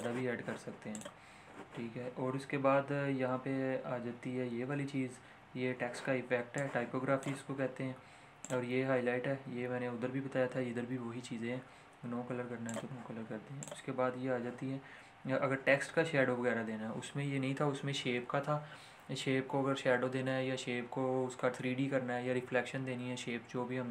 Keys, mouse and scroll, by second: 6.5-8.4 drag, 12.9 click.